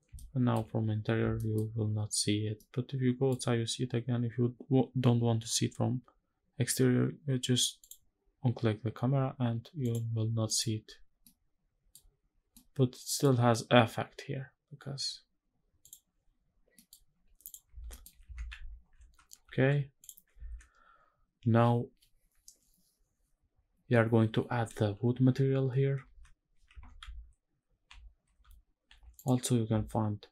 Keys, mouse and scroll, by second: 1.1 shift+middle click, 2.1 scroll down 1, 2.3-3.0 middle drag, 7.5 click, 9.5 click, 10.1 click, 10.6 scroll down 1, 10.9-11.6 middle drag, 11.8 scroll up 2, 12.4-12.9 middle drag, 15.5 click, 16.4 scroll down 1, 16.4 middle click, 17.1 click, 17.5 ctrl+s, 17.6 middle click, 18.0 shift+`, 20.1 ctrl+s, 25.7 ctrl+s, 26.4 shift+`.